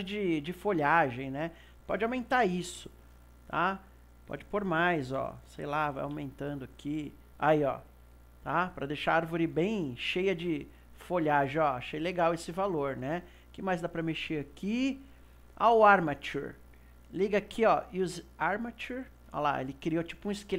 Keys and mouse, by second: 1.6-7.2 drag, 8.2-13.7 middle drag, 13.7-16.7 drag, 18.8-20.4 drag.